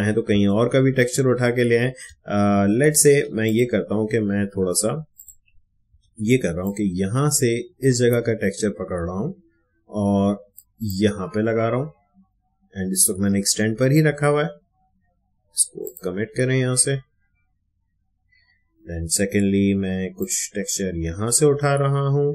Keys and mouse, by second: 0.6 ctrl+alt+z, 3.4 click, 4.5 Escape, 5.1 click, 5.8 ctrl+d, 6.6-15.8 drag, 20.1-22.3 drag.